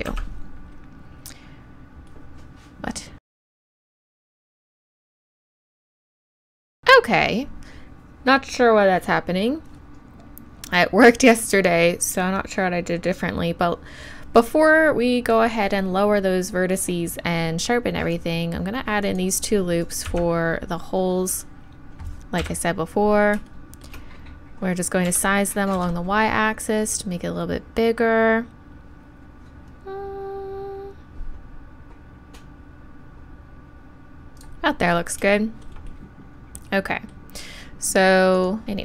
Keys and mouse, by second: 3.6 ctrl+z, 3.7 ctrl+z, 3.8 ctrl+r, 4.4 ctrl+r, 5.8-6.6 ctrl+z, 6.6 ctrl+r, 22.4 KP_7, 25.1 s, 34.4-38.6 right drag, 35.4-38.3 drag, 38.6 KP_7.